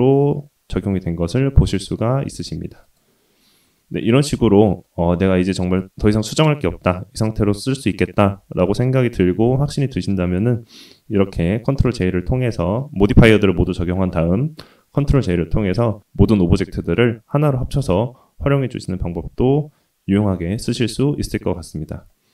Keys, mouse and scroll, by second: 2.3 g, 4.4-4.8 middle drag, 5.1-8.0 middle drag, 8.5-8.8 shift+middle drag, 9.9-10.5 middle drag, 10.6-13.1 middle drag, 13.5-16.0 middle drag, 16.4-16.9 shift+middle drag.